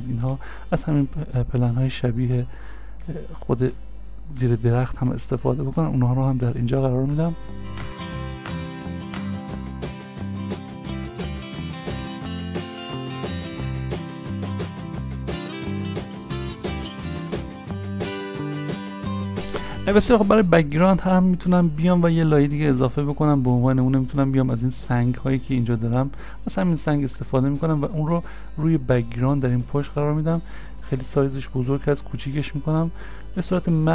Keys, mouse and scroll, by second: 12.2 scroll down 1, 12.3 middle click, 13.9 middle click, 15.4 ctrl+f, 18.9 ctrl+f, 20.7-22.5 scroll down 1, 30.1-30.7 scroll down 1, 30.7 s, 33.4 scroll, 33.5 scroll up 1.